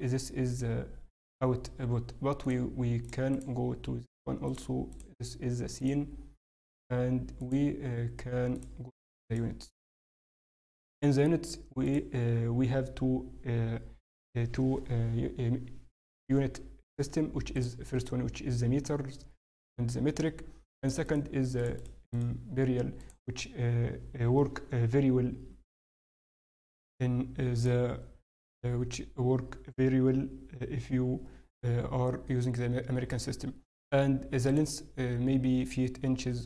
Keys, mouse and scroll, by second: 20.7 click, 27.5 click, 34.5 click.